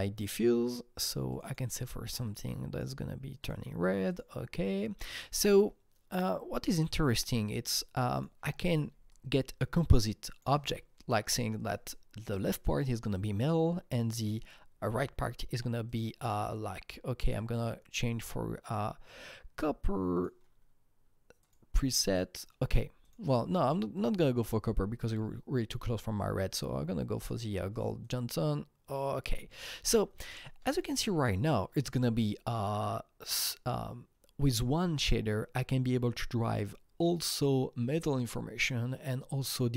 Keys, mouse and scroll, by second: 0.3-1.3 scroll up 2, 1.3 double click, 2.3 click, 4.1-6.7 drag, 7.1 click, 8.1 click, 9.1-13.9 alt+drag, 14.0-15.8 alt+drag, 15.8-19.0 drag, 20.1 click, 23.0 click, 23.9 click, 27.1 click, 27.3 click, 28.0 click, 29.7 click.